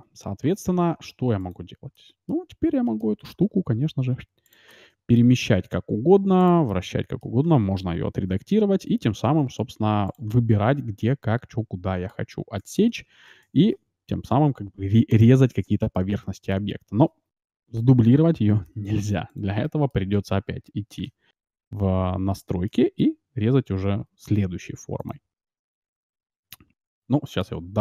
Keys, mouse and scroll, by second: 1.3-2.9 right drag, 1.9-4.6 middle drag, 3.4 g, 4.8-6.2 middle drag, 5.4 r, 6.6-8.2 middle drag, 8.0 r, 8.4 middle click, 10.2-12.2 middle drag, 13.6 shift+d, 15.6 x, 15.9-17.6 middle drag, 18.6 Delete, 19.6-21.4 middle drag, 21.0 ctrl+shift+x, 22.6-24.3 middle drag, 26.0-27.8 middle drag.